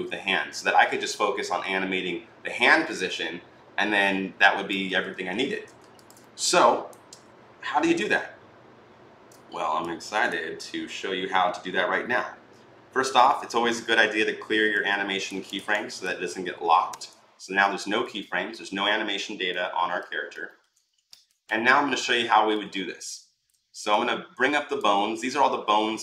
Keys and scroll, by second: 5.3 ctrl+z, 16.8 Delete.